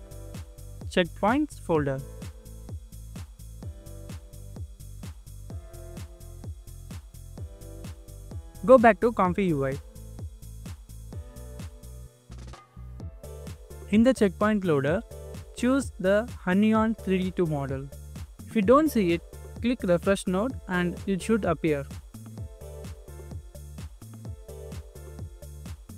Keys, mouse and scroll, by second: 1.1 double click, 10.2 scroll up 1, 23.8 scroll down 1, 25.0 scroll up 1, 25.3-25.7 scroll down 1, 25.7-25.9 scroll up 1.